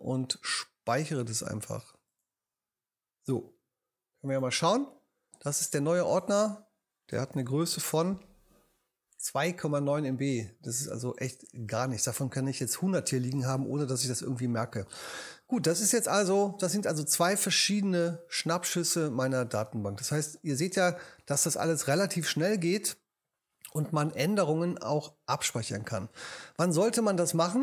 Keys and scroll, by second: 7.3 super+i.